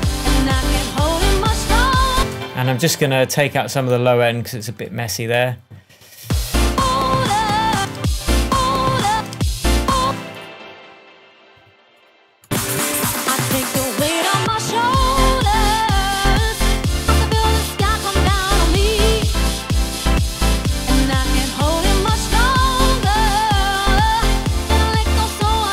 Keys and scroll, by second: 2.1 super+space, 6.2 space, 7.7 space, 9.1 space.